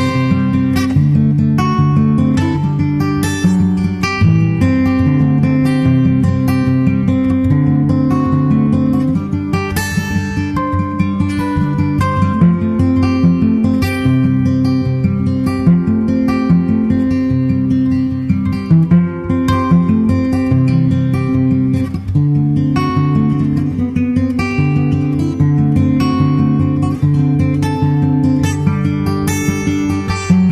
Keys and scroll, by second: 0.0 super+Tab, 0.6 super+Tab, 14.5 super+v, 14.7 super+Right.